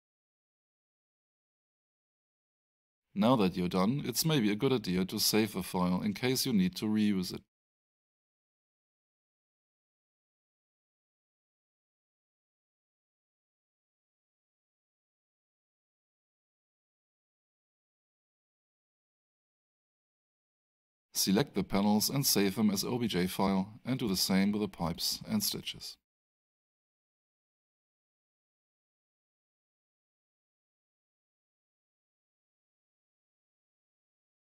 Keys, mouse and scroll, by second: 2.6 click, 5.5 click, 7.4 click, 7.7 double click, 9.5 click, 12.6 click, 16.2 click, 20.7 click, 33.0 click.